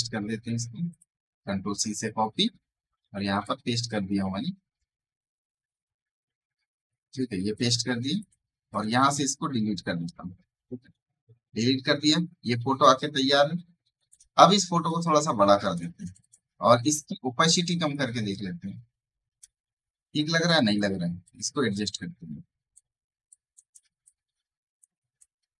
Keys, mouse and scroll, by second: 0.8 click, 7.4 click, 8.6 right click, 8.9-14.8 drag, 14.8-20.3 shift+drag, 20.3 space, 20.4 right click, 20.6-22.6 drag, 22.6 alt+click, 23.9-25.5 ctrl+drag.